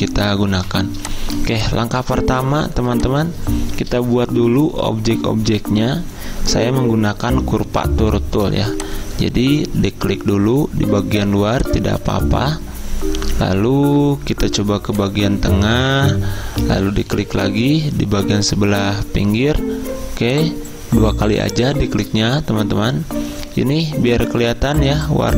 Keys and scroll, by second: 0.6 v.